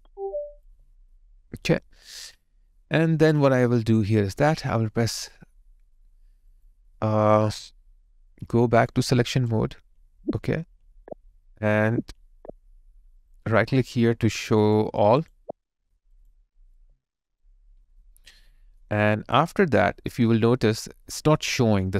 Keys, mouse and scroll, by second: 13.2 right click, 16.8 alt+right click, 18.4 alt+middle click.